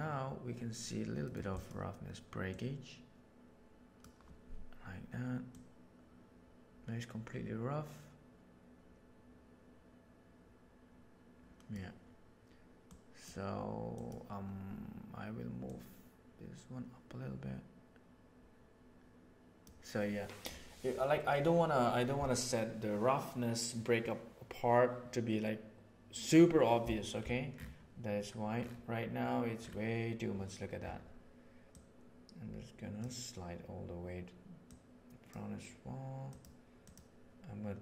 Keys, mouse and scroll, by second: 1.2 middle click, 1.5 click, 2.4-4.1 drag, 5.4-11.6 drag, 12.8 click, 13.9 click, 15.4 click, 31.8-33.1 drag, 34.7 click, 36.3 click.